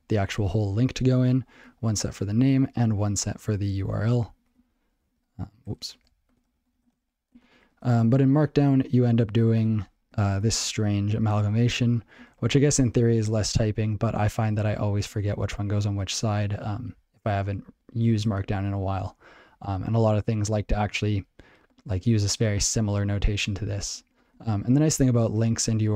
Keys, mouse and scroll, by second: 4.1 r, 4.4 l, 4.5 alt+b, 6.6-7.6 typing, 9.8 ctrl+g, 11.9 click, 12.3 ctrl+f, 12.9 ctrl+alt+f, 13.2 ctrl+alt+f, 13.8 ctrl+alt+b, 14.2 ctrl+alt+b, 15.3 ctrl+alt+f, 15.5 ctrl+alt+f, 16.1 ctrl+alt+b, 16.6 ctrl+alt+b, 17.4 ctrl+alt+b, 18.1 ctrl+a, 21.7 click, 21.8 click, 22.2 ctrl+e, 22.6 ctrl+a, 24.4 ctrl+p.